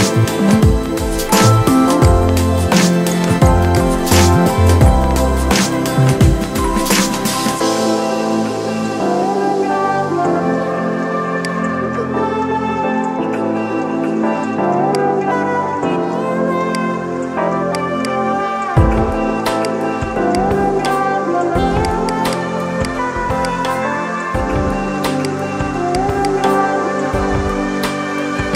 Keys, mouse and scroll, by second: 11.2-16.5 drag, 17.8 right click, 18.2 right click, 19.5-25.1 drag, 26.1 right click, 28.4-28.5 drag.